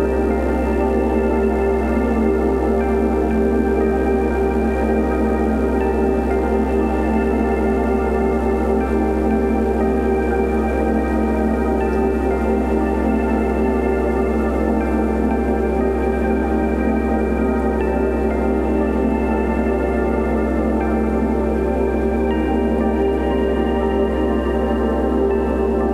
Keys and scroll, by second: 0.6 ], 2.0 [, 2.7 [, 3.2 ], 3.7 ], 4.8 space, 5.6 ], 6.2 [, 7.2 ], 9.5 v, 9.8 super+d, 10.2 v, 10.9 shift+super+e, 13.2 space, 16.5 shift+super+n, 16.7 shift+super+Return, 17.5 shift+Return, 18.2 super+[, 19.5 b, 24.5 [.